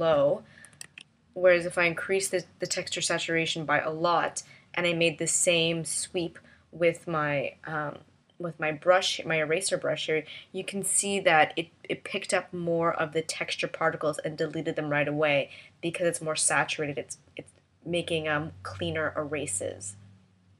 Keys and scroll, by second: 0.8 super+z.